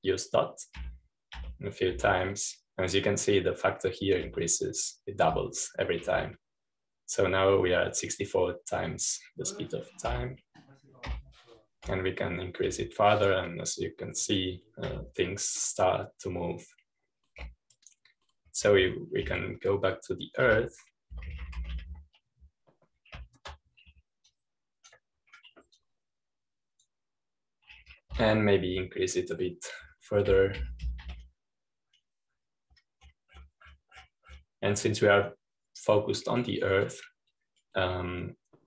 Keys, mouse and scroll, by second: 15.4 typing, 23.4-24.1 typing, 26.2 ctrl+g, 26.2-29.4 drag, 32.0-32.7 typing.